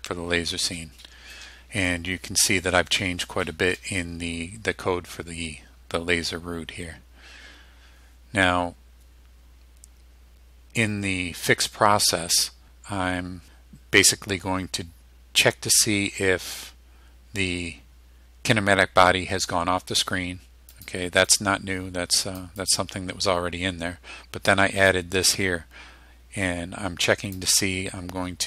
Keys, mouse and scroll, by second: 20.8 click, 21.4-22.6 drag, 22.7 click, 25.0-27.6 drag.